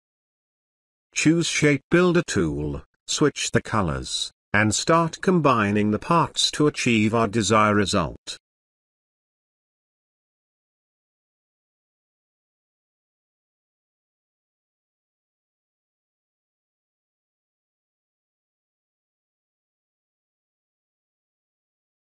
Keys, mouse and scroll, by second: 7.9-9.7 drag, 17.1-17.7 drag, 21.8 space.